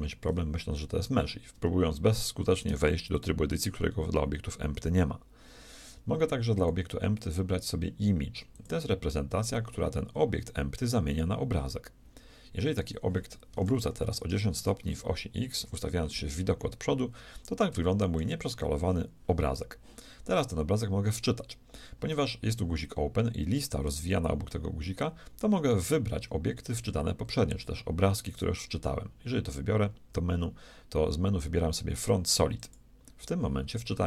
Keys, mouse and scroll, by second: 1.5 Tab, 2.3 Tab, 3.1-5.2 drag, 6.5-8.5 drag, 13.5 r, 15.6 KP_1, 17.3 middle click, 19.3 middle click, 28.3-30.3 drag.